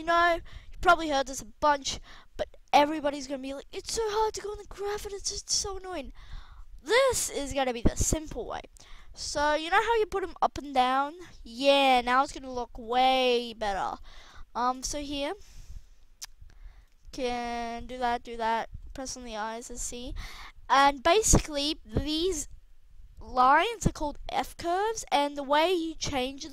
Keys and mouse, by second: 1.1-2.9 right drag, 20.2 a.